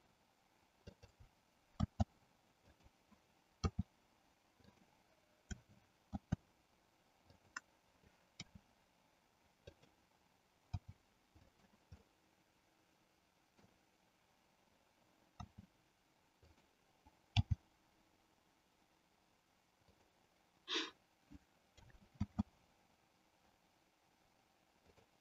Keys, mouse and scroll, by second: 1.0 click, 2.7 click, 3.6 r, 4.7 click, 6.1 shift+d, 7.5 click, 8.4 r, 10.7 g, 12.0-13.7 middle drag, 15.3 r, 17.3 g, 22.3 shift+d, 24.9 click.